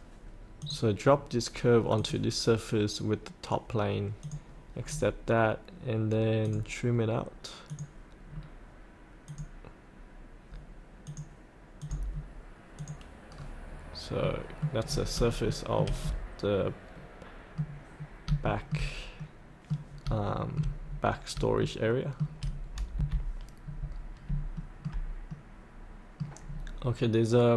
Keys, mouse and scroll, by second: 4.4 click, 4.8-6.4 scroll down 1, 6.4 click, 8.2 scroll down 1, 9.3 click, 13.3 scroll up 1, 14.2 middle click, 14.5 scroll up 1, 15.4 shift+middle click, 16.0-18.0 middle drag, 18.0 scroll down 1, 18.4 shift+middle click, 18.6-20.0 shift+middle drag, 20.3 shift+middle click, 20.9-21.3 scroll up 1, 21.6 shift+middle click, 22.9 F8, 23.7-24.2 scroll down 1, 24.5 shift+middle click, 25.3 middle click, 26.5 scroll down 1.